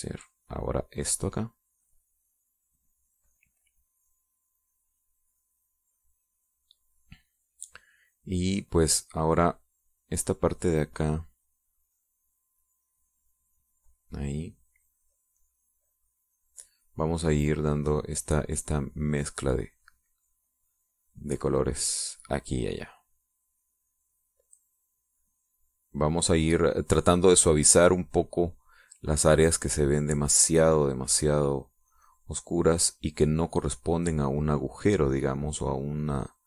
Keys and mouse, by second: 0.1-6.1 drag, 6.5 click, 6.9-8.1 middle drag, 12.5-36.4 drag.